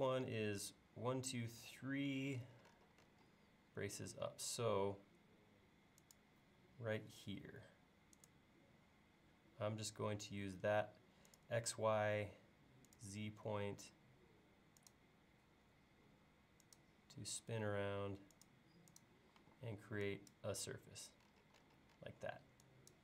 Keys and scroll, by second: 4.1 l, 19.4 e.